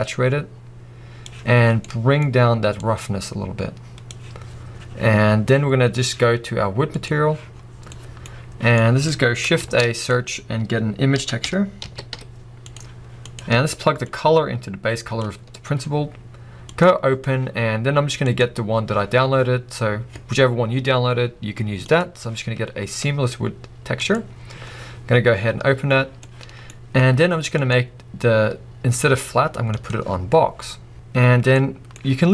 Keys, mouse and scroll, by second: 1.9-2.8 middle drag, 2.8-7.1 drag, 15.3-26.4 drag, 26.4 middle click, 30.0-30.9 drag, 30.9-32.3 middle drag, 30.9-31.3 scroll up 2.